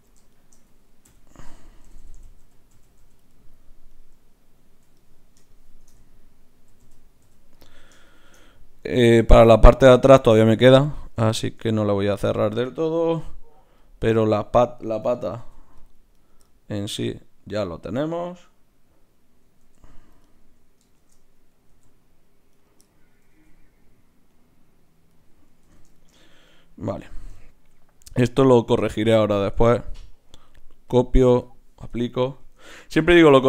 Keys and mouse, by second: 1.1-2.2 f, 2.4 f, 2.7 f, 3.0 f, 4.1-5.0 f, 5.5 click, 6.0-6.8 f, 7.2 f, 13.2 KP_Divide, 15.4 ctrl+r, 19.6 alt+s, 21.0 shift+Tab, 21.7 alt+s, 23.2 s, 25.6 ctrl+z, 28.0-29.7 drag, 29.6 Tab, 30.9 click, 32.0 Tab, 32.6 ctrl+Tab.